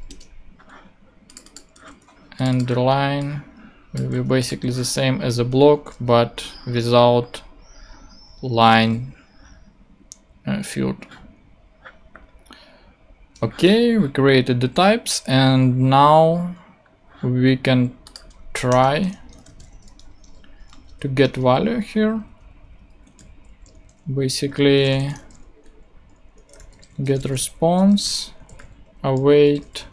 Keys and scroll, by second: 0.1 Return, 1.8 super+c, 2.6 super+v, 4.6 super+v, 5.4 alt+super+v, 6.7 alt+super+l, 14.7 ctrl+Tab, 18.7 Return, 18.9-19.9 typing, 21.3 shift+Return, 21.8 Return, 21.9 Down, 22.5 alt+shift+Down, 22.6 alt+shift+Up, 23.2 alt+shift+super+Up, 23.2 alt+shift+super+Left, 23.4 super+Tab, 24.3 Tab, 24.7-29.8 typing.